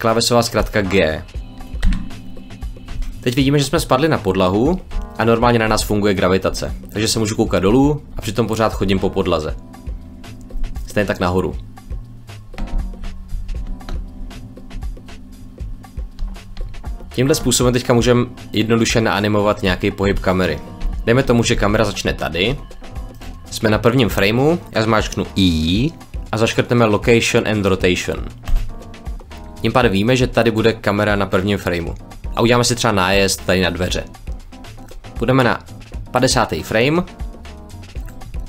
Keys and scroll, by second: 1.7 g, 4.8 w, 7.5 shift+a, 8.1 w, 8.7 shift+a, 9.3 shift+w, 12.6 shift+a, 13.2 shift+w, 13.3 shift+a, 14.1 a, 16.1 d, 16.6 a, 22.5 s, 25.5 i.